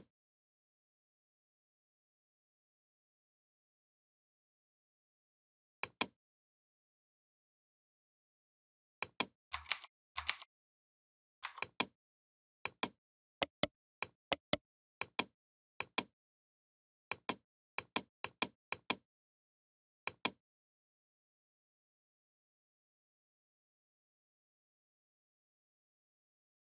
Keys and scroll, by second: 9.5 ctrl+g, 10.0 ctrl+g.